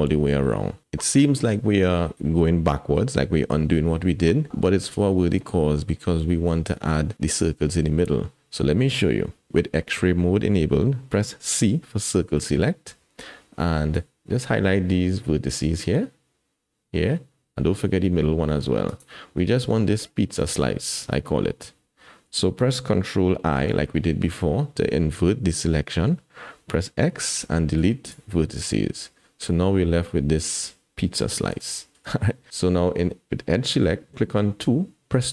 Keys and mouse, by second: 9.5 alt+a, 11.6 c, 23.6 ctrl+i, 27.0 x, 31.6 alt+z.